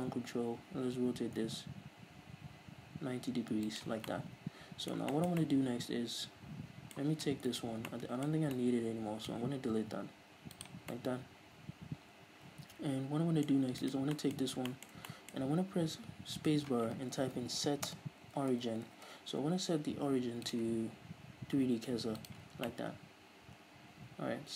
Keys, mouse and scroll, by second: 3.9 ctrl+click, 4.2-7.6 middle drag, 7.6 right click, 8.0-13.9 middle drag, 10.0 x, 13.9 right click, 14.3-16.5 middle drag, 14.5-14.8 scroll up 2, 16.5 space, 22.8-24.5 middle drag.